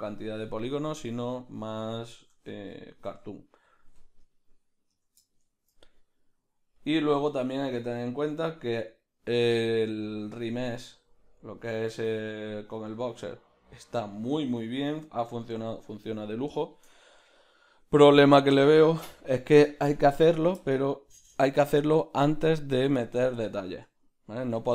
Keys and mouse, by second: 0.7 f, 2.5 Tab, 2.8 right click, 3.7 Tab, 5.3-6.8 shift+middle drag, 6.8-15.6 drag, 15.2 Tab, 15.6 Tab, 15.6-24.7 ctrl+middle drag.